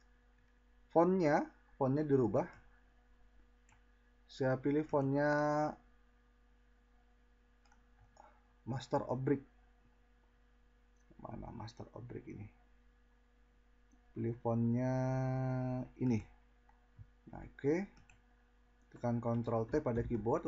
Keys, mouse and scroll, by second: 2.5 click, 20.0 ctrl+t.